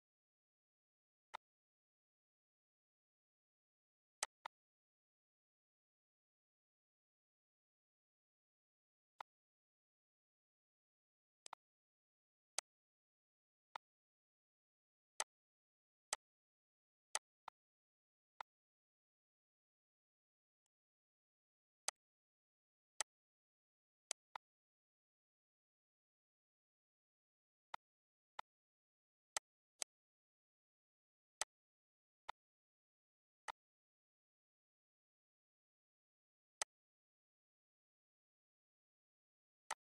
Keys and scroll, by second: 34.5 Delete.